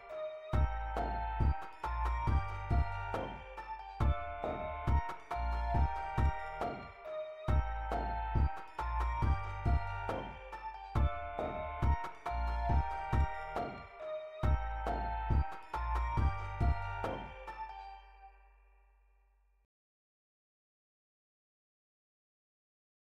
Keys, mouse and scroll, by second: 23.0 shift+z.